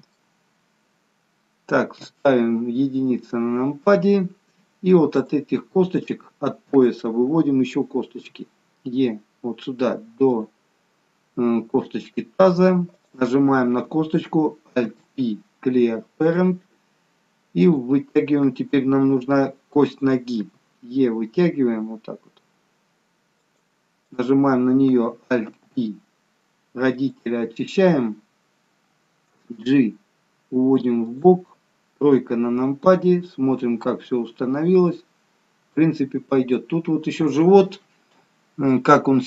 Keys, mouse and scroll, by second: 1.9 KP_1, 3.5-4.3 scroll up 2, 5.1 click, 8.2 e, 13.0 click, 14.9 alt+p, 17.6 click, 20.4 e, 24.0 click, 25.4 alt+p, 29.3 g, 32.0 KP_3.